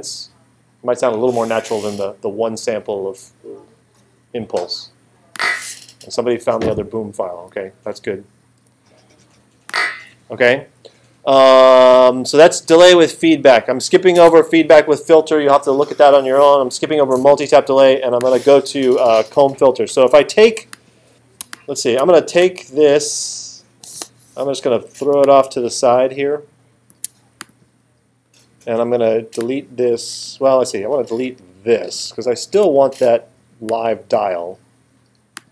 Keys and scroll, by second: 32.5 BackSpace.